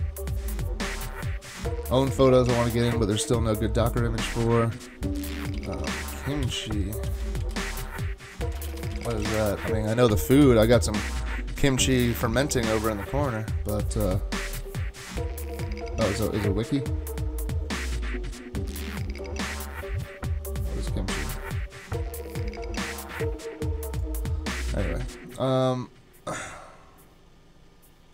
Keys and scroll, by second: 5.3-9.6 typing.